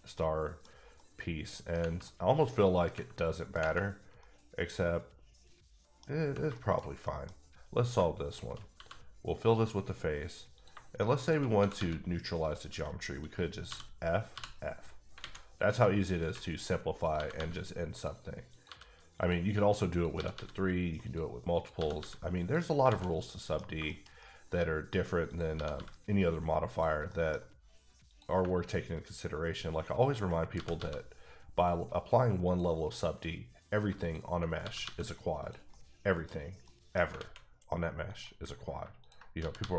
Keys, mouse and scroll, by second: 0.1 middle click, 0.9 middle click, 1.7 scroll down 1, 2.0 middle click, 3.0-3.3 scroll up 1, 3.3 middle click, 4.2 middle click, 6.0 scroll down 1, 6.5 shift+middle click, 6.8-7.3 shift+scroll up 3, 7.0 middle click, 7.8 click, 7.9 shift+click, 8.7 f, 10.5 click, 10.7 shift+click, 11.5 click, 11.5 g, 11.7 g, 12.4 click, 13.7 f, 14.3 f, 15.0 scroll down 2, 15.2 alt+a, 15.8 middle click, 16.4 scroll up 1, 17.0 click, 17.1 g, 17.3 g, 17.9 click, 18.5 click, 18.6 g, 19.1 click, 19.9 click, 20.1 g, 20.3 g, 21.0 click, 21.6 click, 21.7 g, 22.0 g, 22.4 click, 22.8 alt+scroll down 1, 23.0 a, 23.2 middle click, 23.6 scroll down 2, 23.9 shift+middle click, 25.3 click, 25.5 g, 25.7 g, 26.7 click, 27.1 middle click, 28.1 click, 30.5 g, 30.7 g, 32.4 click, 34.6 g, 34.8 g, 35.4 click, 35.7 middle click, 36.6 middle click, 37.2 alt+a, 38.1 click, 39.4 g, 39.6 g.